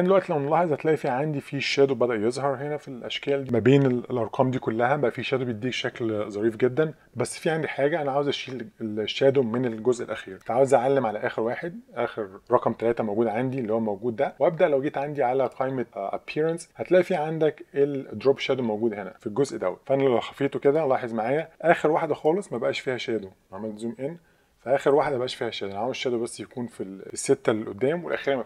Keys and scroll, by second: 10.3 super+0.